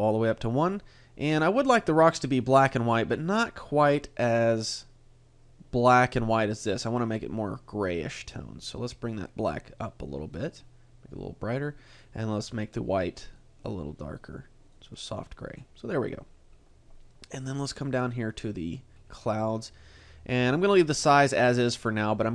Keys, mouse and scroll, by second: 6.8 click, 12.4 click, 17.9 click.